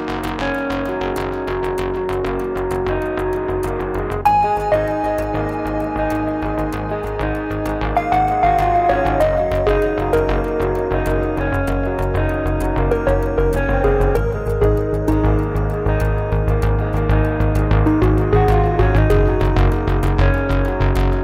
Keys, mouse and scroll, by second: 0.0 click, 1.1-4.0 typing, 5.1-6.1 drag, 7.5 click, 9.0 click, 9.8 click, 10.3 click, 12.7 click, 13.6 KP_5, 13.8 KP_Enter, 15.1 click, 16.3-17.5 typing, 19.6 click, 21.0 middle click, 21.0-21.2 scroll up 2.